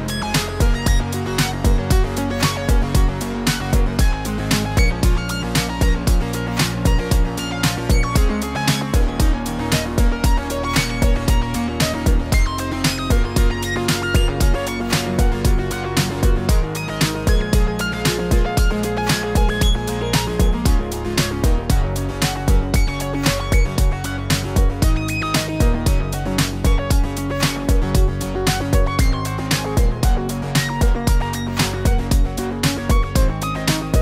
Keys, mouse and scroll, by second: 3.1-3.7 click, 3.3 click, 3.5 click, 4.0 click, 4.5 click, 4.6 click, 4.7 click, 4.8 scroll down 4, 4.9 middle click, 5.0 shift+middle click, 5.2 scroll up 2, 5.2 shift+middle click, 5.3 middle click, 5.5 shift+middle click, 5.6 click, 5.9 click, 6.1 click, 6.2 click, 6.3 click, 6.7 click, 6.9 click, 7.2 click, 7.9 click, 8.1 click, 8.2-8.5 scroll down 3, 8.2 middle click, 8.8 ctrl+s, 9.0 shift+middle click, 9.5 click, 9.7-10.4 scroll down 8, 10.4-10.8 scroll up 5, 10.8 click, 11.0 click, 11.1-11.6 scroll down 3, 11.6 click, 11.7 click, 12.1 click, 13.6 click, 14.1 click, 14.5 click, 14.6-15.1 scroll down 2, 15.1 click, 15.7 click, 15.8 scroll down 1, 16.4 scroll down 1, 17.1 click, 17.7 click, 18.0 click, 18.1 scroll down 4, 18.4 click, 18.5 click, 18.8 click, 18.9 click, 19.1-19.5 scroll down 3, 19.3 click, 19.5 click, 19.7 click, 19.7 click, 20.0 click, 20.1-20.4 scroll down 4, 20.4 click, 20.6 click, 21.3 click, 21.9 click, 22.0 click, 22.6 scroll down 2, 23.8 click, 24.8 click, 25.9 click, 25.9 middle click, 26.1 Tab, 26.3 shift+middle click, 26.4 middle click, 26.7-27.2 click, 26.8 click, 26.9 click, 27.6 click, 27.8 click, 27.9 click, 28.4 click, 28.4 middle click, 29.4 click, 29.9 click, 30.2 scroll up 2, 30.4 middle click, 30.7-31.4 click, 31.3 click, 32.3 click, 33.0 click, 33.4 click, 33.6 click.